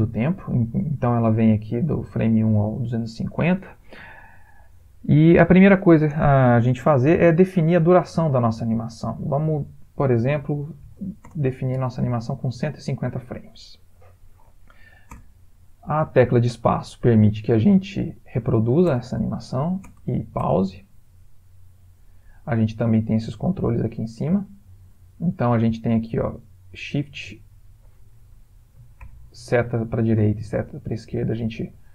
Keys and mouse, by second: 9.2 click, 15.2 space, 19.0 space, 19.8 space, 20.5 space, 21.7 click, 29.0 shift+Right, 30.2 shift+Left, 30.5 shift+Right, 30.9 shift+Left, 31.1 shift+Right, 31.4 shift+Left, 31.7 shift+Right.